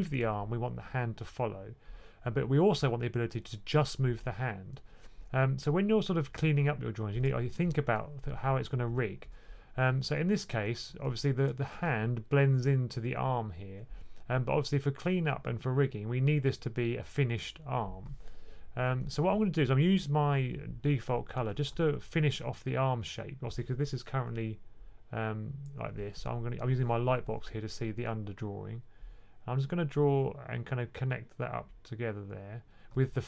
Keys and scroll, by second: 10.5 typing, 21.6 2.